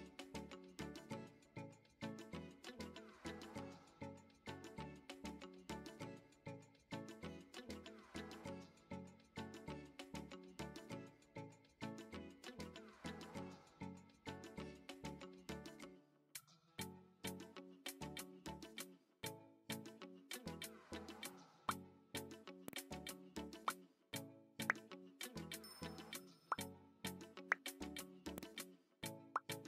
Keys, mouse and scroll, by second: 0.5 click, 0.8 middle click, 1.4 shift+middle click, 2.8 click, 4.8 click, 6.0 middle click, 6.5 shift+middle click, 7.0 middle click, 8.0 drag, 10.8 middle click, 11.9-15.6 right drag, 16.1 middle click, 16.6 shift+middle click, 17.2-18.1 middle drag, 18.5 middle click, 19.2 shift+middle click, 19.8 middle click, 23.0-24.3 middle drag, 24.5-25.7 middle drag, 26.3-28.2 middle drag, 28.4 middle click.